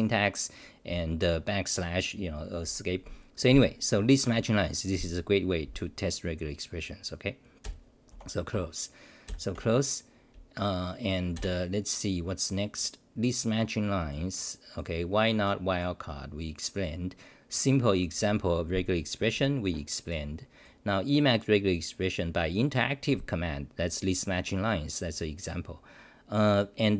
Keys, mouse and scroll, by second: 7.6 ctrl+w, 8.1 n, 8.5 Home, 9.2 ctrl+w, 9.5 -, 11.4 ctrl+r.